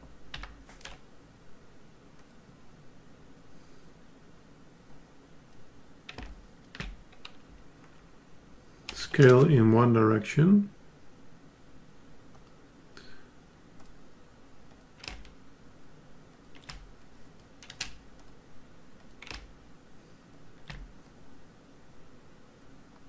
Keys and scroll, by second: 0.3 alt+Up.